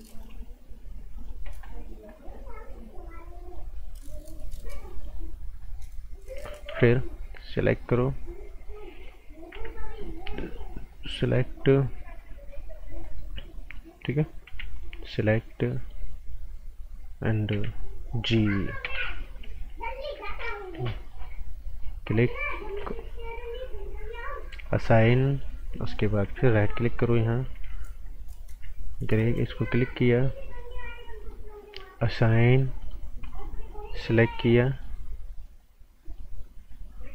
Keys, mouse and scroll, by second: 4.9 right click, 5.6 scroll up 1, 6.7 b, 7.8 click, 9.5 t, 10.1 click, 12.8 scroll down 1, 13.0 right click, 14.4 b, 14.7 click, 15.7 alt+right click, 17.5 t, 18.6-19.3 typing, 20.2-21.1 scroll down 1, 21.1 click, 25.0-25.7 scroll up 2, 25.2 right click, 25.7 right click, 26.4 alt+right click, 27.5 typing, 28.9 click, 32.2 scroll down 1, 32.4 right click, 33.1-33.5 scroll up 2, 33.2 right click, 34.7 click.